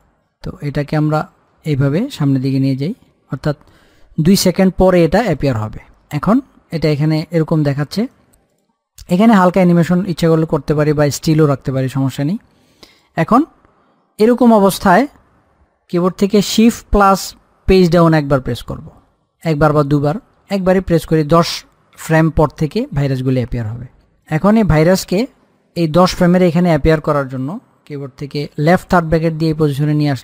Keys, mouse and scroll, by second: 0.2-1.7 drag, 1.8-7.6 drag, 8.3 click, 13.2 click, 16.8 click, 18.0 shift+Page_Down, 20.0 shift+Page_Up, 24.4 click, 29.0 [.